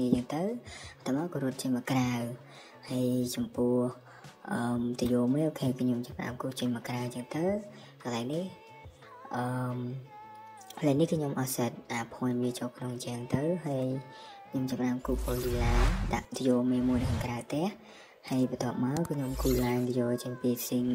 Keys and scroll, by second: 0.4 Escape, 2.5 space, 4.0 Escape, 5.3 space, 7.3 Escape, 9.9 m, 11.0-14.2 typing, 13.1 Escape, 15.5 Escape, 16.8 typing, 18.2 typing.